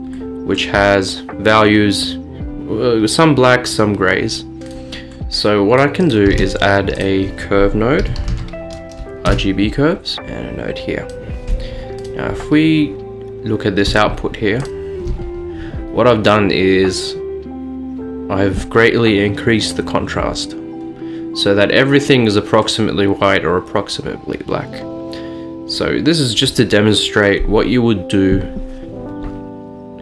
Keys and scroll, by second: 6.4 a, 8.1 typing, 9.4 Return.